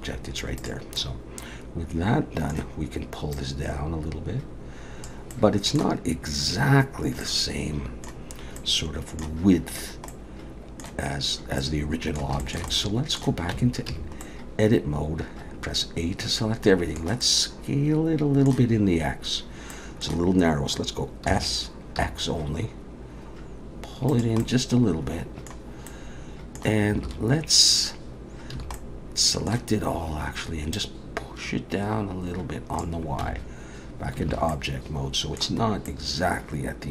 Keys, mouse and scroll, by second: 0.6 click, 1.0 middle click, 3.3 click, 5.3 middle click, 7.2 middle click, 8.4-8.9 scroll up 2, 8.6 middle click, 10.1 middle click, 11.6 middle click, 12.4 shift+middle click, 12.7 shift+middle click, 13.5 Tab, 13.9 a, 14.2 middle click, 19.7 middle click, 21.3 s, 24.4 middle click, 25.9 middle click, 27.0 alt+a, 28.5 a, 28.8 middle click, 30.7 click, 33.2 Tab, 34.3 alt+a, 34.5 middle click, 35.6-36.2 scroll up 2, 35.9 middle click.